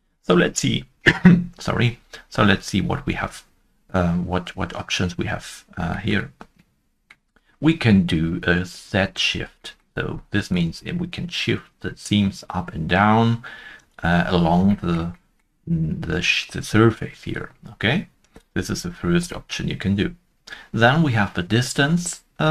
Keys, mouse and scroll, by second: 5.6 shift+middle click, 5.6 scroll down 1, 6.4 middle click, 6.4-8.3 scroll down 1, 10.5 middle click, 10.7 shift+click, 14.1 shift+right click, 14.1 scroll down 1, 17.3 scroll down 1, 17.3 shift+click, 18.2 shift+click, 18.8 shift+right click, 18.8 shift+right click, 18.8 shift+click, 18.8 scroll down 1.